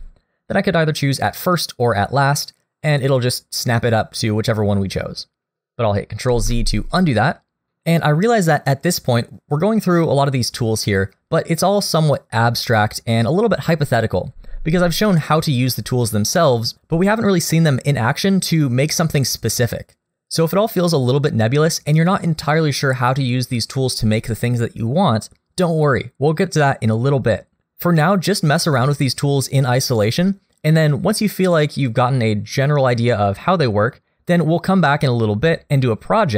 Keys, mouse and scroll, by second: 6.3 ctrl+z, 14.8 scroll down 1, 15.1 middle click.